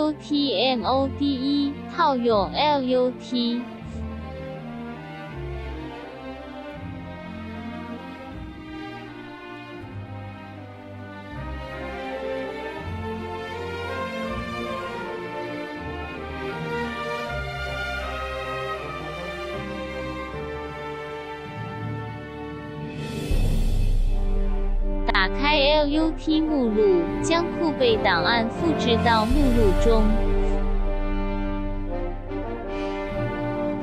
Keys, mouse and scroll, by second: 3.8 alt+s, 4.7 right click, 14.0 click, 21.6 click, 25.1 click, 33.1 click.